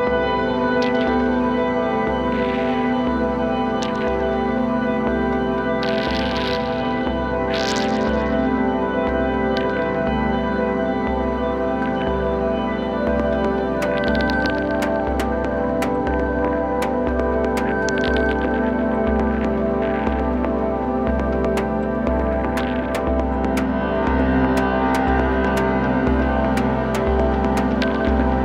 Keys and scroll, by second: 20.4-21.3 typing.